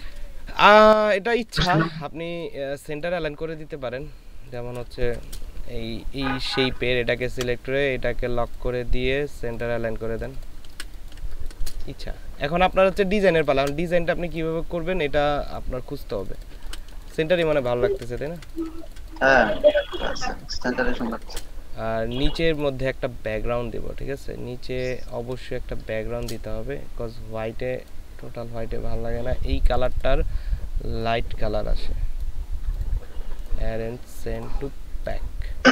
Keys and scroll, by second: 1.2 ctrl+space, 4.9 ctrl+space, 10.6 ctrl+space, 16.6 ctrl+space, 19.4 ctrl+space, 20.9 ctrl+space, 25.2 space.